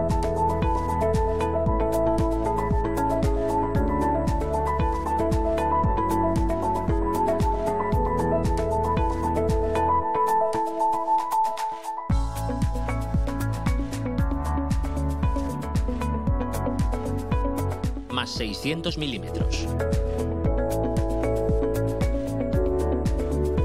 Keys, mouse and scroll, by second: 1.3 click, 3.0 click, 6.2 F2, 7.3 Right, 7.5 BackSpace, 9.7 -, 10.0 p, 10.6 a, 11.0 Return, 17.4 click, 18.3 click, 18.9 click, 20.3 6, 20.5 0, 22.2 Return, 22.7 click.